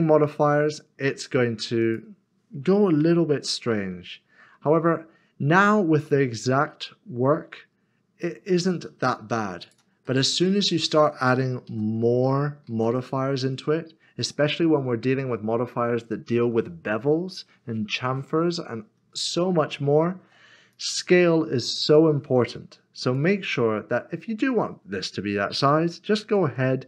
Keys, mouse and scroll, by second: 0.5 middle click, 1.1-1.8 scroll down 1, 3.0 g, 9.6 click, 10.0 middle click, 11.7 ctrl+z, 12.7 ctrl+z, 14.3 middle click, 20.7 click, 25.9 click, 26.2 ctrl+a.